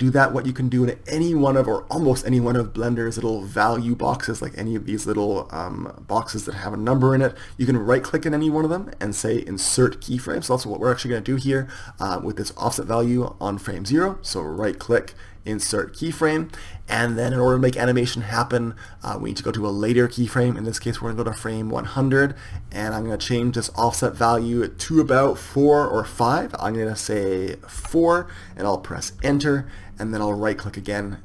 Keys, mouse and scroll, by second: 16.7-19.8 right drag, 19.8-22.2 drag.